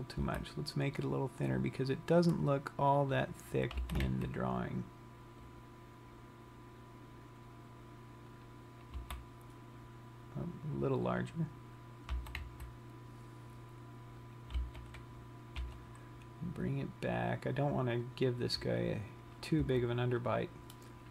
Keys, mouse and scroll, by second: 1.6 s, 3.7 click, 4.6 g, 12.2 click, 12.2 s, 12.9 g, 14.8 click, 15.4 g.